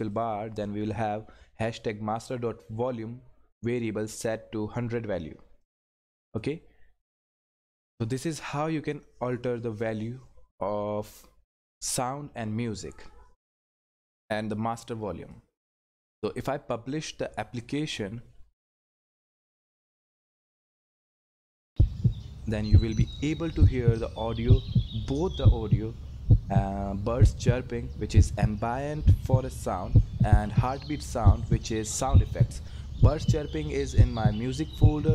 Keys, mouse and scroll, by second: 5.6-8.7 drag, 15.3-16.9 drag, 19.3 click.